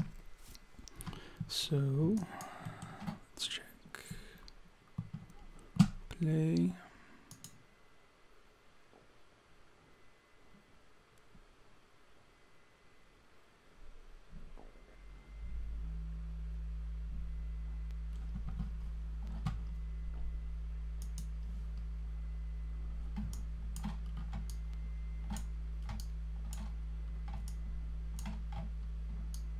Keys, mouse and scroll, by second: 1.7-2.6 scroll down 3, 2.2 alt+click, 2.6 alt+middle click, 7.3 click, 21.0 click, 23.3 alt+click, 24.1-24.5 scroll up 3, 24.5 alt+click, 26.0 alt+click, 27.0-27.5 scroll down 2, 27.5 alt+click, 29.3 alt+click.